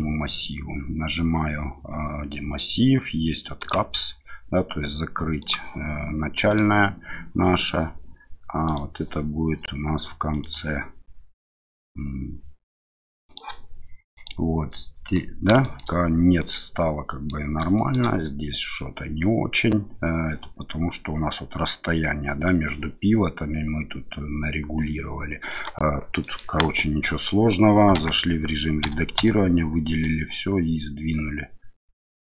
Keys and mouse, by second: 3.6 click, 5.4 click, 15.6 shift+middle drag, 16.4-17.3 middle drag, 17.8 shift+middle drag, 25.5 click, 26.2 middle click, 26.6 KP_1, 27.9 Tab, 28.8 a, 29.2 a, 30.0-32.3 drag.